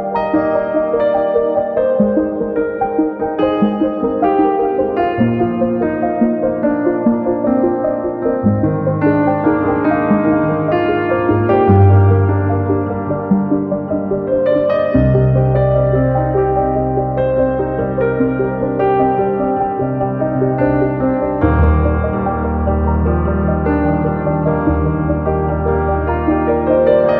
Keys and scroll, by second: 7.8 typing, 25.9 super+c, 26.0 super+v.